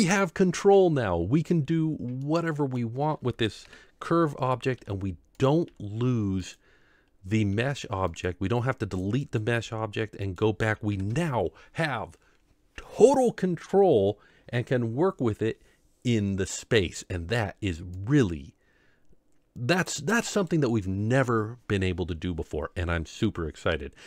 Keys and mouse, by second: 2.2-2.7 middle drag, 3.6 KP_7, 4.8 r, 5.6 g, 7.5 r, 9.6 g, 10.9 ctrl+KP_7, 18.1-20.5 drag.